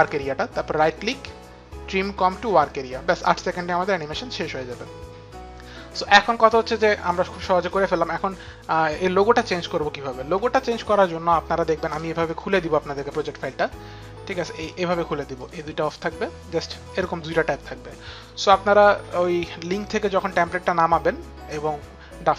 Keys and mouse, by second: 0.8 right click, 2.1 click, 2.1 right click, 3.4 click, 12.1 click, 14.4 click, 14.7 click, 15.4 click, 21.5 click.